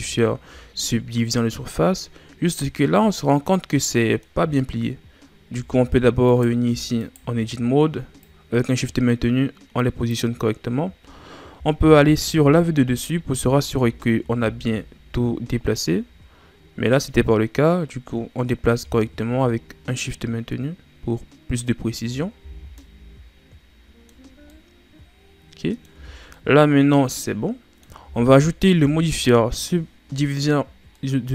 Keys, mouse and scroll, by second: 0.1-1.1 scroll up 8, 1.8 scroll up 1, 2.5-5.6 middle drag, 5.6 Tab, 6.2 right click, 7.0 shift+right click, 8.2-11.2 drag, 12.4 KP_7, 13.3 z, 13.9-14.4 scroll up 5, 14.4 scroll down 4, 14.8 scroll up 2, 15.7-18.8 drag, 22.4 z, 22.6 scroll down 3, 22.8-25.9 middle drag, 25.9 Tab, 26.2 scroll down 1, 26.3-28.0 middle drag, 28.0 Tab, 28.7 Tab, 29.2-29.5 scroll down 3, 30.9-31.3 middle drag.